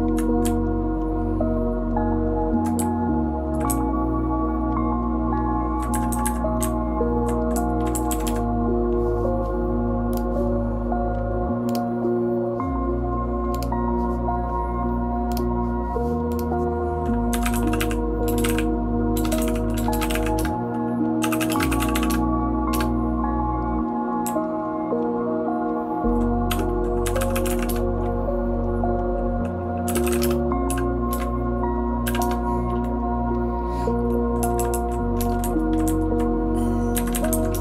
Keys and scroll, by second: 34.6 Down, 34.7 Down, 34.8 Down, 35.2 Return, 35.4 Down, 35.7 Down, 35.8 Down, 36.1 Down, 36.9 Up, 37.1 Up, 37.3 Up, 37.5 Return.